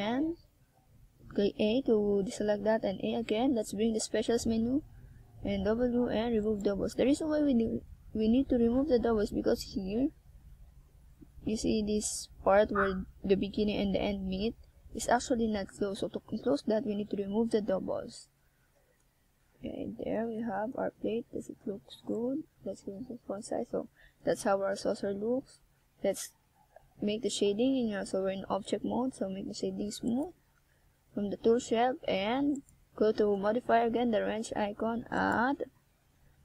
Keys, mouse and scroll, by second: 2.0 KP_1, 3.2 right click, 4.0 z, 4.8 z, 6.0 click, 7.0 z, 7.5 z, 7.8 right click, 8.1 middle click, 11.3 scroll up 2, 11.8 right click, 12.3 middle click, 14.5 middle click, 16.5 middle click, 17.8 KP_1, 18.6-19.1 scroll down 5, 20.3 shift+scroll up 1, 21.5 middle click, 27.5 click, 28.8 KP_1, 30.8-31.3 scroll up 1, 31.3 shift+a, 33.9 click, 34.5-35.0 shift+scroll down 3, 36.0 Tab, 36.3 right click.